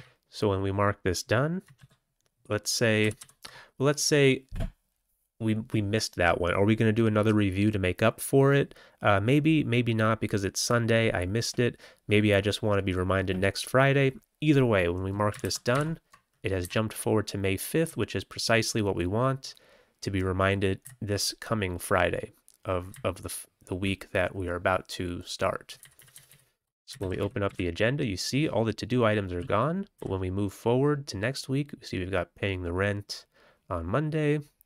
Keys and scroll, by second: 1.7 ctrl+c, 3.0 ctrl+g, 3.1 ctrl+g, 15.4 ctrl+c, 15.6 ctrl+t, 16.5 Down, 17.8 Right, 18.3 Right, 18.3 Right, 20.8 Left, 22.9-23.7 Left, 25.7 Left, 25.9 Left, 26.0 Left, 26.2 Left, 26.9 ctrl+c, 27.1 a, 27.4 a, 29.3 w, 29.9 f.